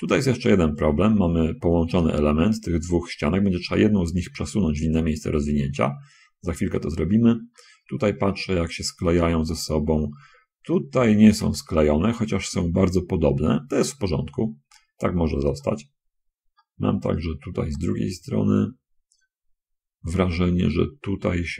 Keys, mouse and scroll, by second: 0.8 middle click, 5.2-6.6 scroll down 2, 7.2-8.5 shift+middle drag, 8.6-9.6 middle drag, 10.2 scroll down 1, 10.9 middle click, 11.8 shift+middle click, 14.3 scroll down 1, 14.7 scroll up 1, 15.1-19.1 middle drag, 19.1-19.5 scroll up 1, 20.4-20.7 scroll up 1.